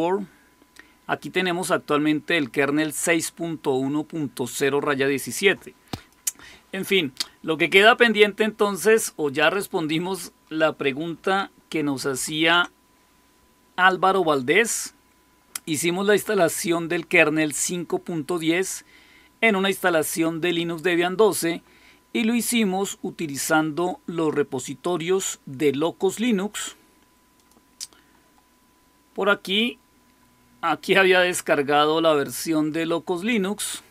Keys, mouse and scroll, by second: 1.0-2.7 drag, 5.2 click, 10.0 click, 12.0 super+6, 23.8 click, 27.3 click, 29.9-30.7 scroll down 1, 30.7-31.3 scroll down 1, 31.3-33.9 scroll down 1.